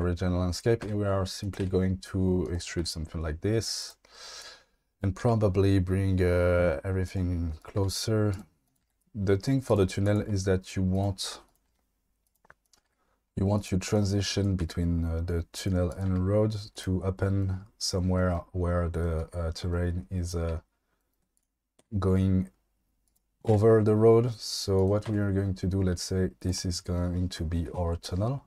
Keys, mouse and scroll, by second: 0.8 e, 1.6 e, 2.8 e, 3.8 click, 5.2 g, 7.6 click, 7.8 g, 8.3 click, 8.8 g, 10.2 g, 11.4 click, 11.6 g, 12.6 click, 12.8 g, 14.6 g, 15.5 click, 16.0 g, 21.8 e, 23.0 click, 23.5 e, 24.8 click, 25.1 e, 26.4 click.